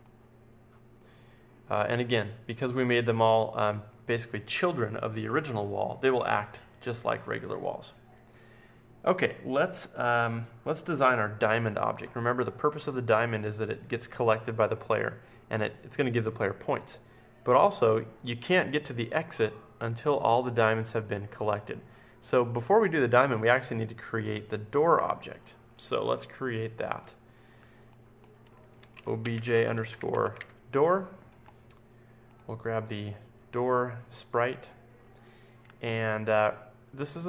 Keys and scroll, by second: 28.6-30.8 typing.